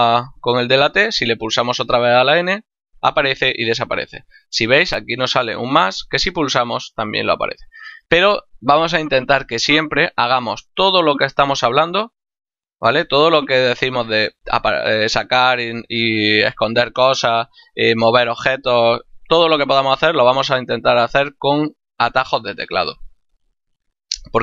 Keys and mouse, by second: 0.9 n, 5.9 click, 7.8 n, 12.3 t.